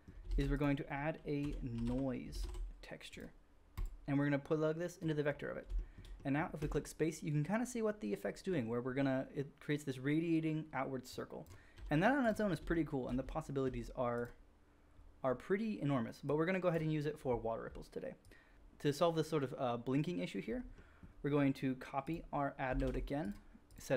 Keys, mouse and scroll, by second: 0.3 shift+a, 5.6-5.9 shift+middle drag, 6.5 space, 11.0-12.3 drag, 11.7 g, 12.3-16.2 shift+middle drag, 14.0 g, 16.2-22.2 drag, 22.2 middle click, 22.7 shift+d, 22.8 middle click, 23.3-23.9 drag, 23.3 right click.